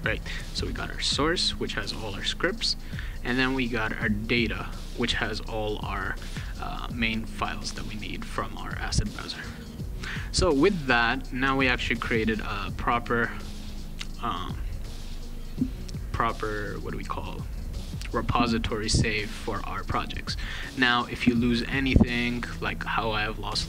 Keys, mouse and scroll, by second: 0.5 click, 3.6 click, 3.7 click, 4.4 click, 6.5 click, 8.3 click, 10.0 click, 12.2 click, 13.2 click, 14.1 click, 17.6 click.